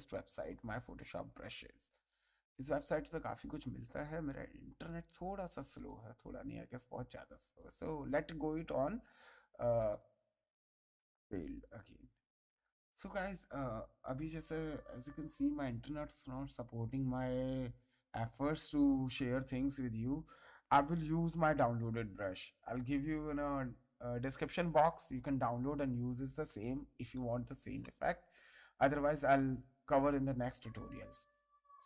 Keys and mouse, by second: 4.8 click, 7.5 click, 9.7 click, 11.5 click, 21.7 click, 24.4 ctrl+Tab, 29.3 click.